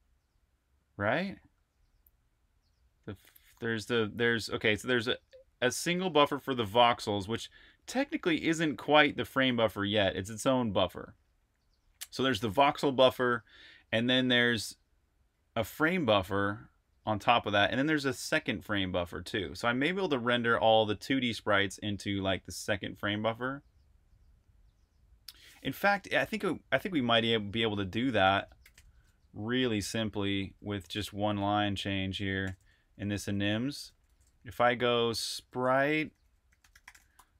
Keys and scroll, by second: 27.4 h, 28.0 BackSpace, 28.4 v, 28.6 Return, 32.2 super+j, 32.4 super+j, 32.9 super+k, 33.5 Escape, 33.7-37.3 typing.